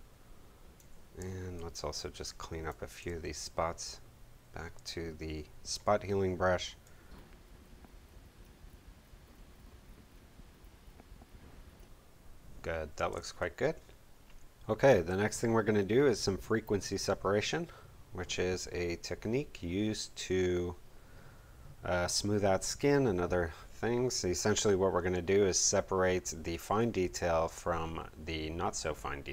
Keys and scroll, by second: 13.1 space.